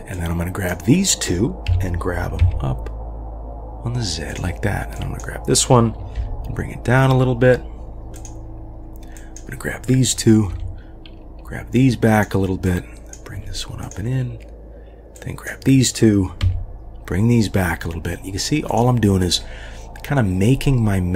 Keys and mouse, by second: 0.1-0.7 drag, 1.7 g, 4.9-5.3 drag, 6.2 g, 9.2 click, 10.5 g, 12.6-13.3 drag, 13.4 g, 15.3 click.